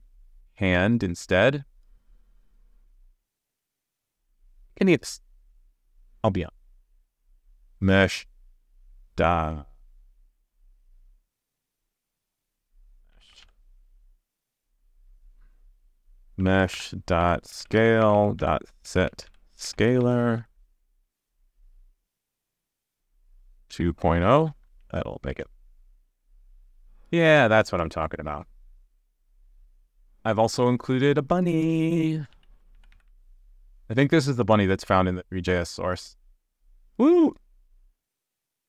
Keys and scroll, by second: 12.0 super+d, 25.3 super+s, 33.5 super+s.